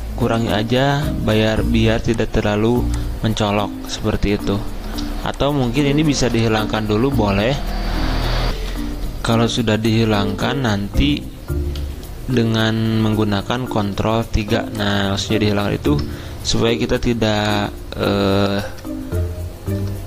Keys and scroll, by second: 7.5 ctrl+z, 8.6 F10, 11.8 ctrl+z, 14.2 ctrl+3, 18.6 alt+Tab.